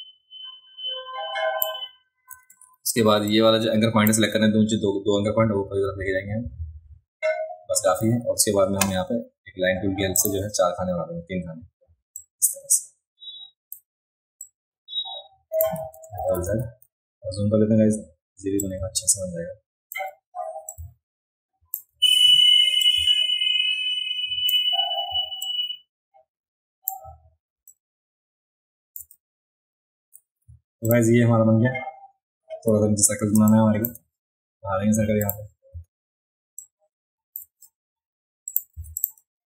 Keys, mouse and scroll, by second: 2.5 a, 3.3 click, 10.2 click, 12.2-13.7 drag, 14.4-15.6 drag, 16.2 ctrl+z, 16.5 ctrl+z, 18.6-20.0 shift+drag, 20.7-21.8 shift+drag, 22.1 ctrl+z, 22.9-24.5 shift+drag, 25.4-26.9 shift+drag, 27.7-29.0 shift+drag, 29.3 alt+scroll up 2, 30.9 click, 33.4 space, 33.5 click, 35.2 click, 36.6 shift+click, 38.5 click, 38.8 v, 39.0 click.